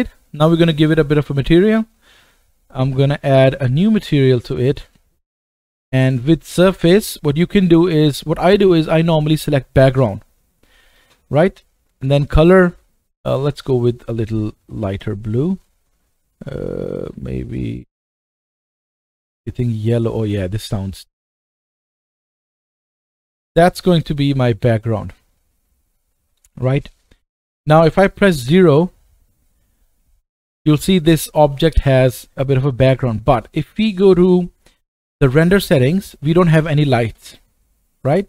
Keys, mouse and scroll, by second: 3.2-12.4 drag, 12.4-15.1 middle drag, 15.1-23.3 drag, 23.2 right click, 24.0-24.6 scroll down 2, 24.6-32.5 middle drag, 28.4 KP_0, 32.5 KP_0, 35.4 click, 37.2 KP_0.